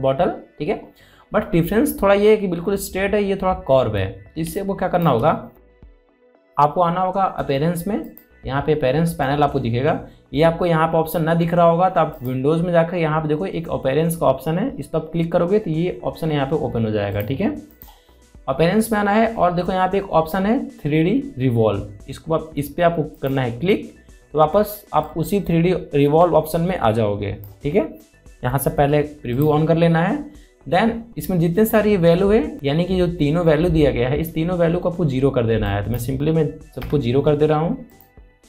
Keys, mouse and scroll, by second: 1.5-1.8 scroll down 2, 3.1 scroll up 1, 6.1 alt+scroll down 1, 6.8 space, 6.8 click, 7.3 space, 9.7 click, 13.8 click, 18.8 click, 20.6-22.1 scroll down 1, 24.8-31.0 drag, 36.4 click, 36.5 click.